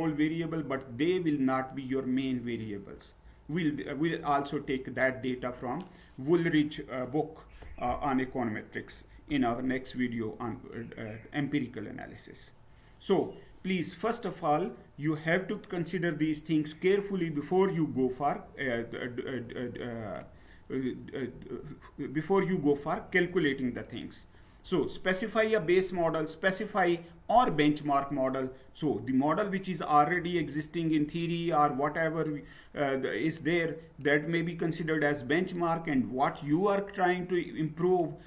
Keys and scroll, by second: 18.0 Down.